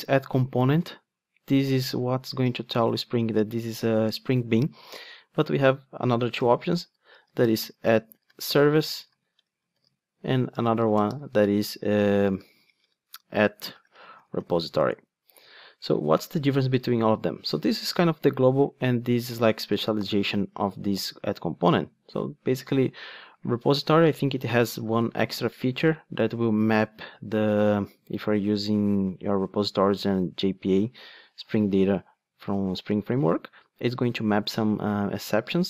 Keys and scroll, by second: 10.2 Return, 14.9 Return, 25.5 super+b, 27.4 ctrl+Tab.